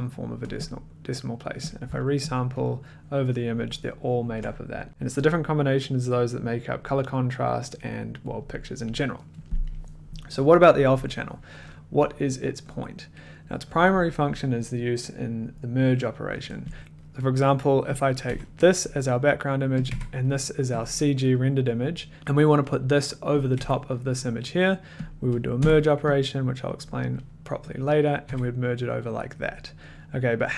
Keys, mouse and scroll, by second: 0.6 click, 1.7 ctrl+click, 2.0 ctrl+click, 2.3 ctrl+click, 4.3 ctrl+click, 16.8 click, 16.8 scroll, 17.1 middle click, 18.0 click, 18.3 1, 19.8 click, 19.9 1, 21.3 click, 22.1 middle click, 22.3 middle click, 23.5 click, 23.5 1, 25.0 click, 25.6 m, 26.2 click, 27.1 click, 27.8 click, 28.3 1.